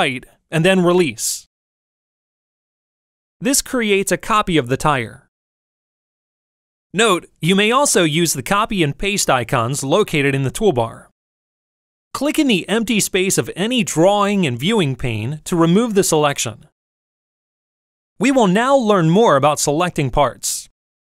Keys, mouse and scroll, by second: 0.9-5.4 ctrl+drag, 17.3 click.